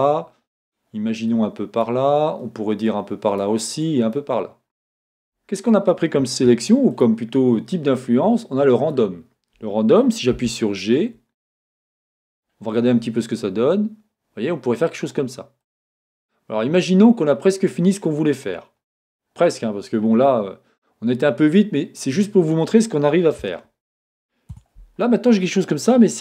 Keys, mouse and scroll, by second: 6.5 Escape, 6.9 click, 10.5-15.7 drag, 15.7-26.2 middle drag, 19.7-20.3 scroll down 1.